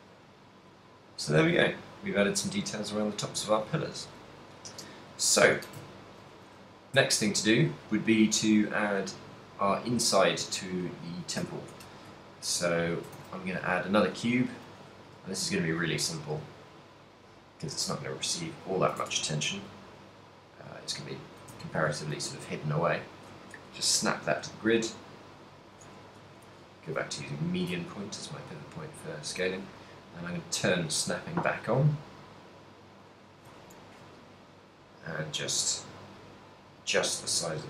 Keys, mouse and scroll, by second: 0.2 middle click, 2.2 middle click, 3.4 shift+middle click, 3.5 shift+middle click, 4.0 middle click, 6.1 ctrl+middle click, 6.6 a, 7.0 a, 7.5 shift+middle click, 8.7 middle click, 10.1 shift+middle click, 10.1 z, 10.5 z, 12.1 KP_3, 12.4 shift+middle click, 13.4 shift+a, 15.3 z, 15.5 g, 18.5 ctrl+click, 19.2 Tab, 19.6 s, 21.0 right click, 21.5 Tab, 22.0 shift+s, 24.8 click, 26.0 Tab, 26.5 a, 26.8 b, 27.9 g, 29.7 right click, 30.5 click, 31.0 g, 33.7 click, 33.7 a, 33.9 b, 34.8 g, 37.5 click.